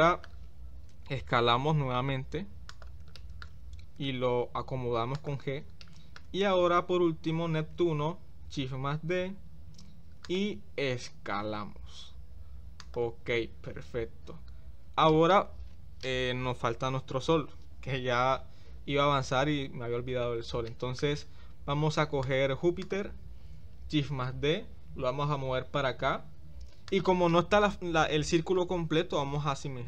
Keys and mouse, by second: 1.3 s, 3.2 shift+middle click, 5.8-6.2 middle drag, 7.8 shift+d, 15.1 shift+middle click, 20.7 shift+middle click, 22.3 click, 24.2 shift+d.